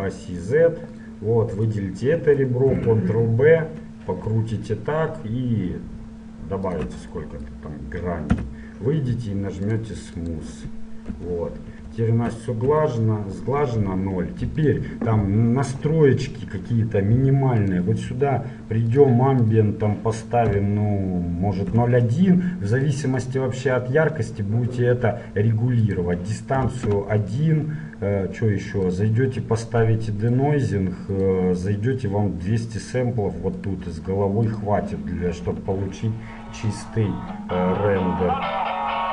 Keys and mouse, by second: 1.7-3.6 right drag, 3.0 ctrl+b, 7.3-9.8 middle drag, 8.5 Tab, 9.8-12.3 drag, 11.3 KP_1, 12.9 KP_0, 17.9-21.3 drag, 23.4-25.1 drag, 26.0-27.9 drag, 29.1-33.4 drag, 33.4 middle click, 33.8-36.5 drag, 35.8 KP_0.